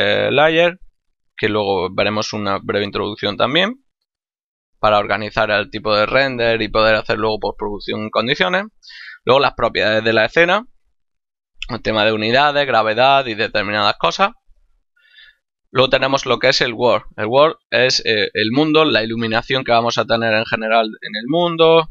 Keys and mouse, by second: 4.3 click, 14.7 click.